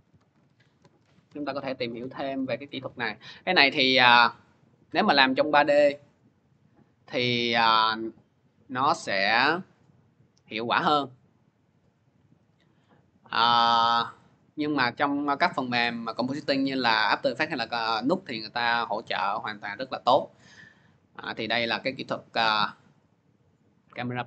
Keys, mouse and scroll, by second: 0.0-2.5 typing, 8.5 click, 13.3 middle click, 13.3 scroll down 2, 13.5-14.0 scroll, 19.2 click, 19.8 click, 23.2 click.